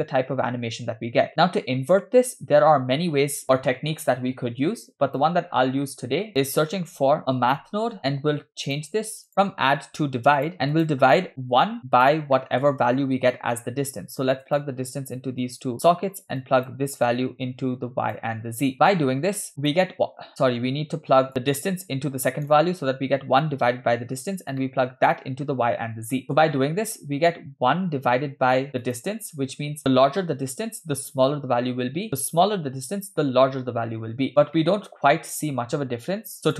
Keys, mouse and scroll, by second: 5.5-5.8 scroll down 2, 5.9 middle click, 6.4 scroll up 2, 7.1 shift+a, 9.3 click, 10.4 click, 10.7 click, 11.8 click, 12.4 middle click, 13.6-14.7 drag, 15.4-15.9 drag, 16.4 click, 17.5-18.3 drag, 19.5 click, 20.4 click, 21.6-22.3 drag, 24.6 middle click, 26.2 middle click, 28.8 click, 34.4 scroll down 2, 34.6-35.6 middle drag, 36.4 click.